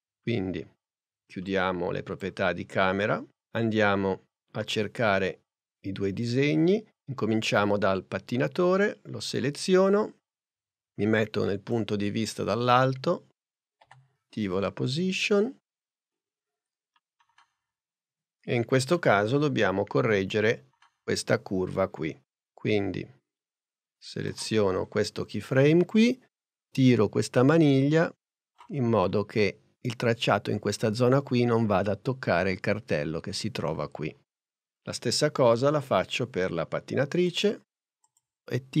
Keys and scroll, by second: 13.9 p.